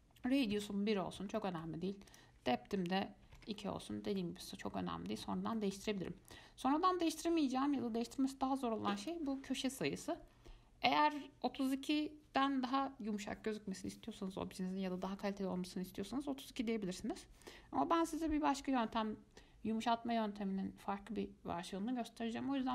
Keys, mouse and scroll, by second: 1.6 middle click, 2.3-4.4 drag, 4.4-9.1 middle drag, 9.2-12.3 drag.